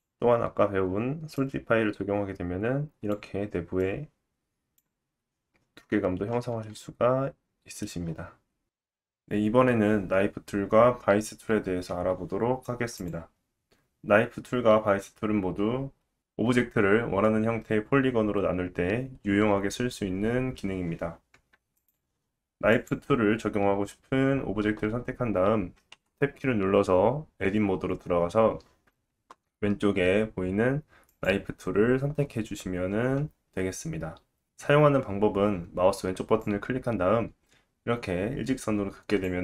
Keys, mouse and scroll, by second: 0.8-4.8 drag, 0.8-3.8 middle drag, 0.8-3.8 right drag, 6.6-8.5 right drag, 6.6 middle click, 9.0 click, 22.7 click, 25.9 Tab, 31.1-34.2 drag, 36.4 click.